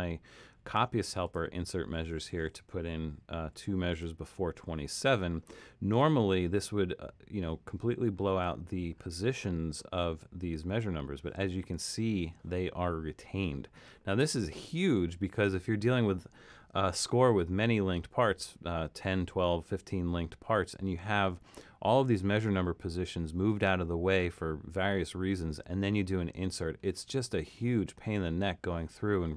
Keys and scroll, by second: 3.5 2.